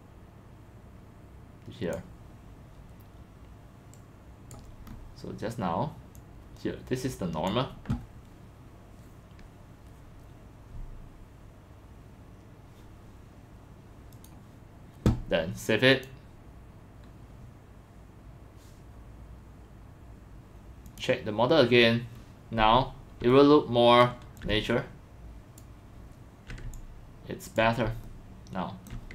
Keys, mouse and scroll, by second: 1.7 click, 4.7 drag, 4.9-5.2 scroll, 6.1 click, 7.5 click, 14.1 click, 15.9 click, 20.8 right click, 20.9 click, 21.8 scroll down 2, 22.0 middle click, 22.0 scroll up 2, 23.3 alt+middle click, 23.7 alt+middle click, 24.0 scroll, 26.0-27.5 alt+drag, 28.9 alt+click.